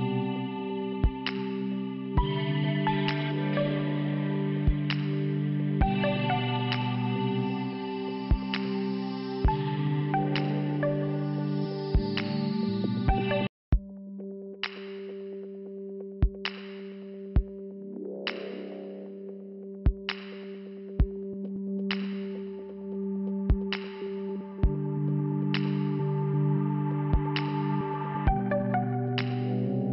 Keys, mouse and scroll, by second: 0.3 click, 0.4 click, 1.7 click, 4.0 click, 6.6 click, 6.7 click, 6.8 click, 6.9 click, 8.1 click, 8.2 click, 12.2 click, 13.8 scroll down 1, 15.8 click, 15.9 click, 21.2 middle click, 22.6 click, 22.8 click, 23.5 click, 23.6 click, 24.0 click, 24.1 click, 25.4 middle click, 26.0 scroll down 1, 26.8 click, 27.6 click, 27.7 click, 28.8 click, 28.8 click, 28.9 click, 29.1 double click.